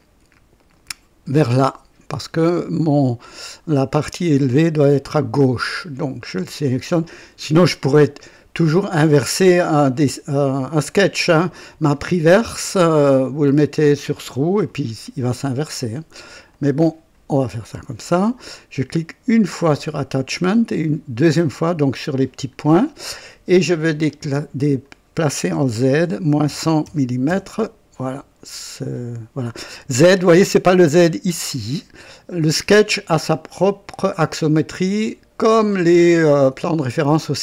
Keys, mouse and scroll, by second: 3.2 click, 4.9 click, 6.6 click, 8.5 click, 13.5 click, 16.5 click, 19.4 click, 21.4 click, 24.0 click, 25.9-27.3 typing.